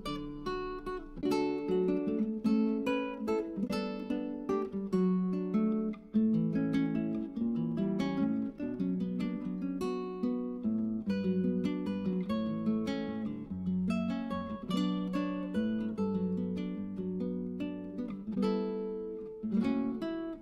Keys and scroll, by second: 5.7-7.6 typing, 11.0 BackSpace.